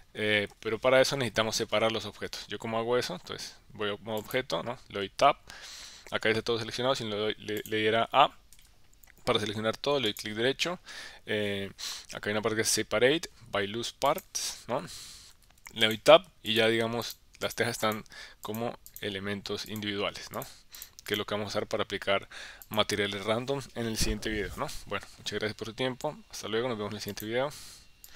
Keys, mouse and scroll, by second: 1.1 KP_1, 4.2 click, 5.1 Tab, 7.6 click, 8.6 a, 10.6-15.3 right drag, 15.3 Tab, 15.8 click, 16.5 click, 17.0 click, 17.4 click, 17.9 click, 18.5 click, 18.9 click, 19.7 click, 20.3 click, 20.8 click, 21.2 click, 22.7 click.